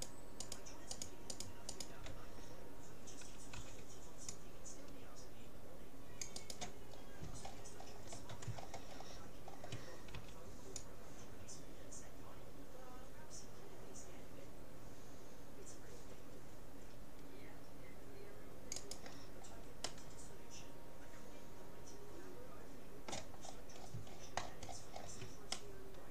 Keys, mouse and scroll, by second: 3.6 c, 6.6-8.1 right drag, 7.6 middle click, 7.9 click, 8.1-11.4 middle drag, 10.2 c, 19.0-20.6 right drag, 19.3 middle click, 20.0 click, 20.8-21.8 middle drag, 23.6-25.6 scroll up 2, 25.6-26.1 middle drag.